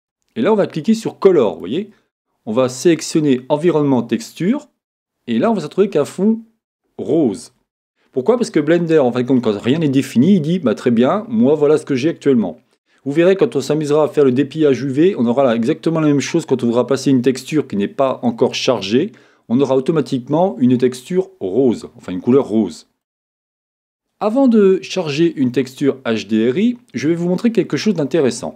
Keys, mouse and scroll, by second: 1.4-3.3 drag, 6.3-8.7 middle drag, 22.4-24.3 middle drag.